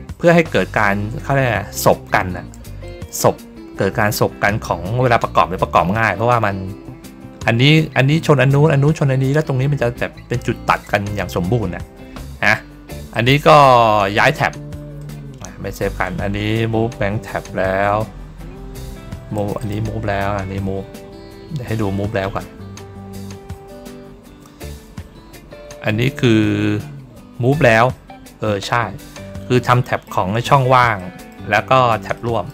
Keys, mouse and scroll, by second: 13.0 click, 14.9 click, 19.3 click, 19.5 click, 27.8 ctrl+middle click, 28.3 ctrl+middle click, 28.7-29.2 ctrl+scroll up 1, 29.6 middle click, 30.3 ctrl+scroll down 1, 30.9 middle click, 32.0 middle click.